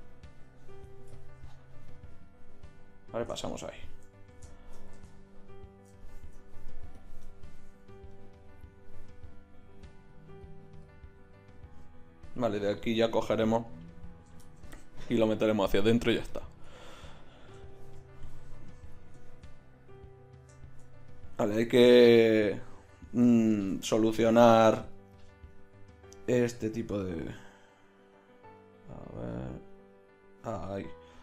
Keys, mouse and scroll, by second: 1.1-2.8 middle drag, 5.0 Tab, 7.0-8.1 drag, 19.4 a, 27.1 z, 30.5 z.